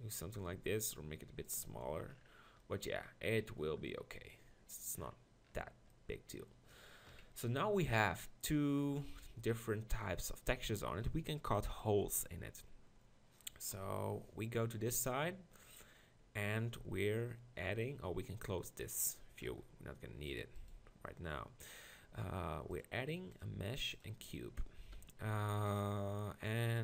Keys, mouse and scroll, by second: 0.3 Tab, 0.6 s, 1.6 Tab, 7.1 KP_1, 13.7 KP_1, 19.0 click, 20.7-22.3 right drag, 23.1-24.0 drag, 24.5 z, 25.3 g.